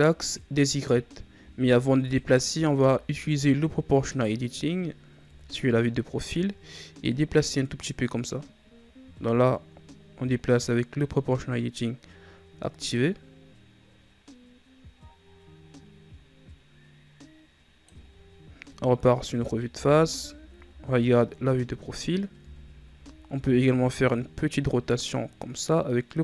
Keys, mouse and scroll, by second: 2.0 alt+right click, 4.0 click, 5.2 KP_3, 7.0-10.0 drag, 18.5 KP_1, 19.2 Tab, 19.6 a, 20.4 KP_3, 22.3 Tab, 23.3 r.